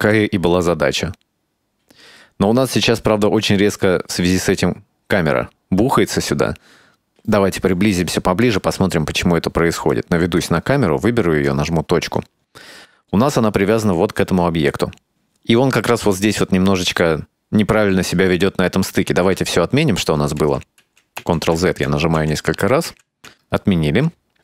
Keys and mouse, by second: 7.3 space, 9.3 s, 9.4 space, 10.1 drag, 11.3 right click, 11.5 KP_Decimal, 12.8 right click, 13.6-15.9 drag, 20.4 ctrl+z, 20.7 ctrl+z, 21.0 ctrl+z, 21.2 ctrl+z, 21.5 ctrl+z, 21.7 ctrl+z, 21.9 ctrl+z, 22.1 ctrl+z, 22.3 ctrl+z, 22.6 ctrl+z, 22.9 ctrl+z.